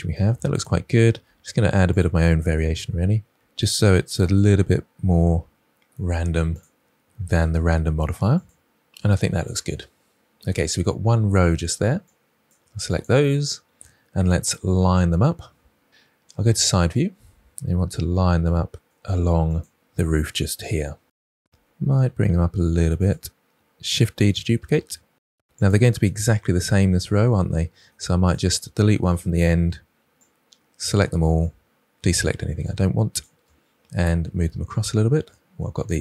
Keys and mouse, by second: 1.2 g, 1.9 r, 2.2 click, 2.4 s, 2.7 y, 3.8-6.2 typing, 4.1 click, 6.2 click, 8.1 r, 8.6 s, 8.9 y, 9.5 click, 10.1 r, 10.3 click, 12.4 click, 12.9 ctrl+drag, 16.4 KP_3, 17.6 r, 18.3 click, 18.4 g, 20.1 r, 20.9 g, 23.1 shift+d, 25.5 click, 26.0 middle drag, 28.2 click, 29.0 Delete.